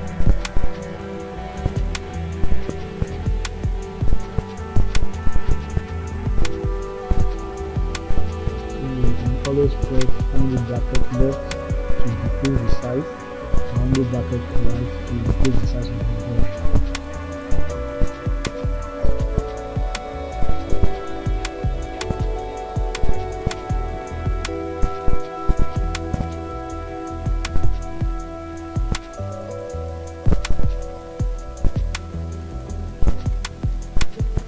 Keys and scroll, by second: 14.5 [, 15.5 [, 17.9 ctrl+z, 27.7 ctrl+z, 29.3 ].